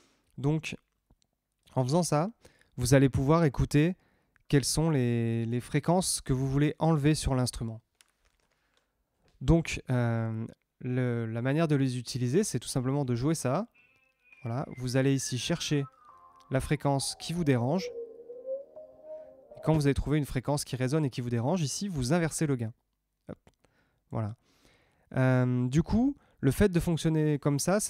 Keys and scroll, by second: 12.9 space, 19.7 space.